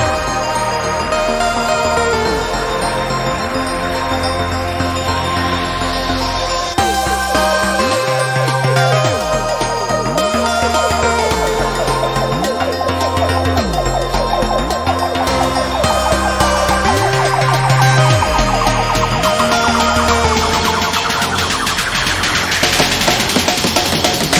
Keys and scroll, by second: 19.2 b.